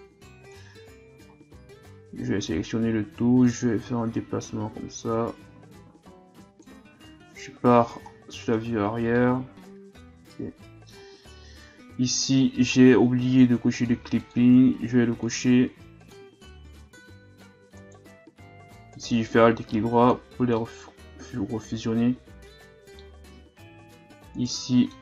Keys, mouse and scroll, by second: 0.9-1.7 scroll down 4, 2.2 a, 2.4 a, 3.4-6.4 drag, 7.4 KP_3, 8.1-8.5 scroll down 3, 8.5-9.1 scroll up 2, 9.1-11.2 middle drag, 11.2-12.4 scroll down 4, 12.4-13.8 scroll down 1, 13.8-15.3 drag, 16.0 click, 16.8-17.7 shift+scroll down 1, 17.7 shift+scroll down 2, 17.8 alt+right click, 18.9-20.6 drag, 20.6-23.4 middle drag, 23.4 Tab, 23.7 Tab, 24.4 alt+right click, 24.7 middle click, 24.9 scroll up 1.